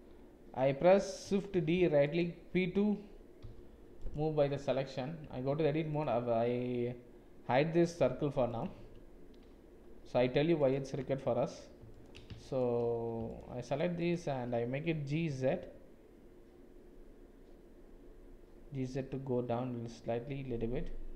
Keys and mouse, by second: 1.5 shift+d, 3.4 p, 5.6 Tab, 6.0-8.0 drag, 8.0 h, 8.7 Tab, 10.1 2, 15.1 g.